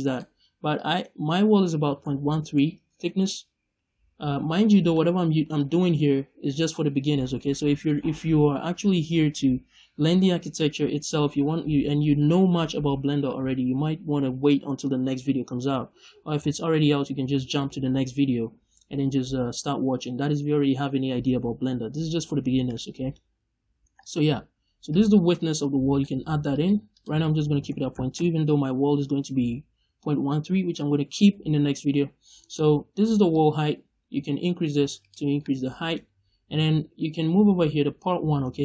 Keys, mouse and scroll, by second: 0.1 right click, 0.6-4.9 drag, 3.0 Return, 4.9 middle click, 5.5-22.6 middle drag, 24.8-25.9 drag, 25.9 right click, 26.4 click, 26.8-35.0 drag, 28.2 Return, 35.0 right click, 35.3 middle click.